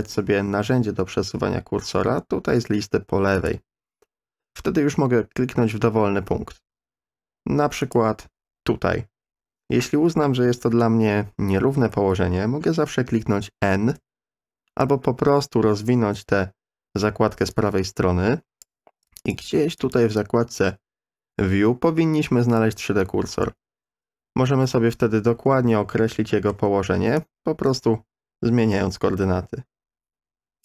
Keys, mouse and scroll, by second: 3.4 click, 7.8 click, 13.9 n, 16.0 n, 17.5-18.7 drag, 19.3 click, 19.8 click, 26.2 shift+middle click, 27.2-30.6 drag.